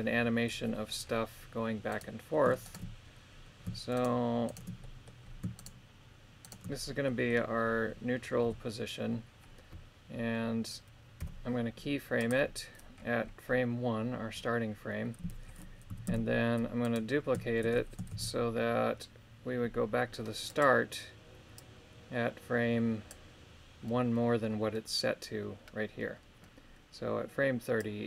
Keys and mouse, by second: 2.7 shift+right click, 4.0 shift+right click, 4.5 shift+right click, 4.8 middle click, 5.6 shift+right click, 6.4 shift+right click, 7.1 middle click, 8.4 KP_3, 11.2 i, 15.9 a, 16.1 a, 16.8 right click, 18.1 shift+d, 20.5 click, 21.6-23.1 drag, 27.8-28.0 drag.